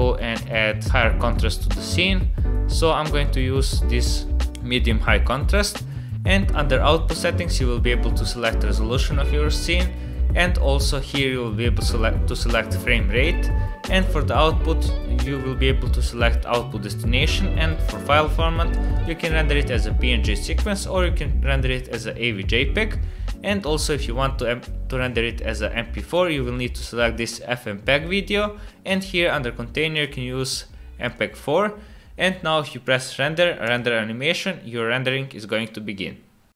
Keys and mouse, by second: 1.2-3.3 drag, 4.1-4.5 drag, 6.4 click, 7.2 click, 18.4 click, 19.2 click, 20.6-23.7 drag, 26.1 click, 30.1-31.1 drag, 32.9-34.2 drag.